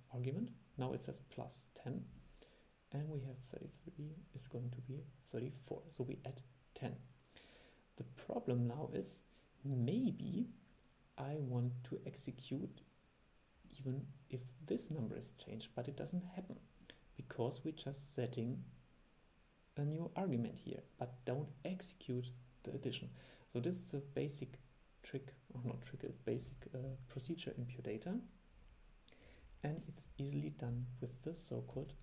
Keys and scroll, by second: 26.6 super+e.